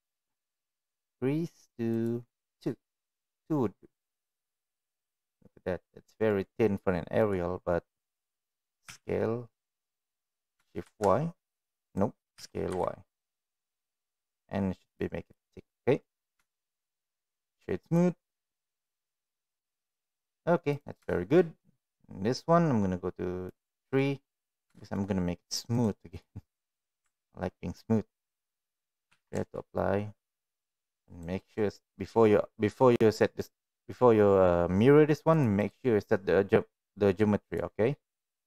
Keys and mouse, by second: 1.8 click, 3.9-4.3 middle drag, 4.6 middle click, 5.8-6.3 middle drag, 7.1 click, 8.2 middle click, 8.8 s, 12.3 s, 15.6-16.0 middle drag, 16.5 shift+middle click, 17.4 right click, 18.2-18.8 middle drag, 19.2 click, 19.5-20.2 middle drag, 20.6 click, 21.0 shift+middle drag, 23.5 click, 23.9 middle click, 24.7 shift+middle click, 25.8 right click, 29.1 ctrl+a, 31.1-32.2 right drag, 33.1 click, 33.5 click, 35.2 click, 35.6-37.5 right drag.